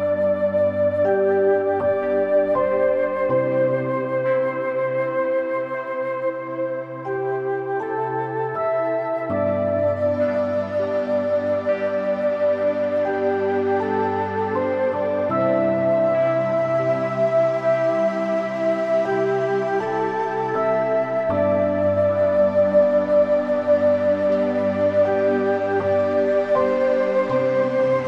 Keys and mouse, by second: 0.8 middle click, 1.3 shift+click, 1.9 middle click, 2.5 shift+click, 2.9 shift+click, 3.4 middle click, 4.2 g, 4.5 y, 7.8 middle click, 8.4 middle click, 8.9 g, 9.1 y, 9.6 click, 9.9 middle click, 10.6 click, 11.0 middle click, 11.4 middle click, 11.7 click, 13.1-14.1 middle drag, 14.4 g, 14.7 y, 15.9 click, 16.2 click, 18.3 click, 18.7 click, 21.1-22.2 drag, 22.7 g, 23.4 Escape, 24.0 click, 24.9 g, 26.8 y.